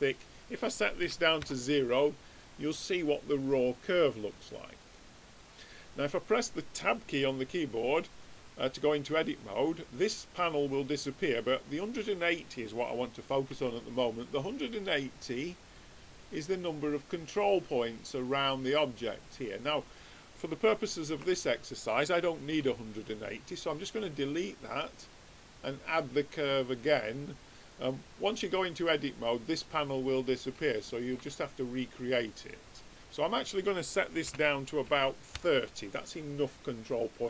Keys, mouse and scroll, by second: 2.1 middle click, 13.5 Tab, 14.2-17.5 middle drag, 15.1-16.9 drag, 17.3-19.5 drag, 19.3-21.1 middle drag, 21.1 Tab, 22.4 x, 25.0-26.7 drag.